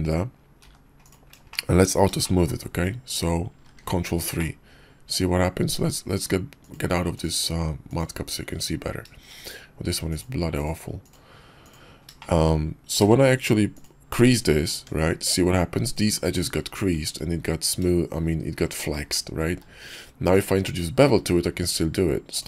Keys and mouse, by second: 0.6 g, 1.5 shift+middle click, 3.7 ctrl+3, 4.4-5.2 drag, 6.6-8.3 drag, 10.2-11.8 drag, 12.2 shift+drag, 13.0 q, 14.8 Tab, 15.8 click, 17.0 Tab, 19.5 q.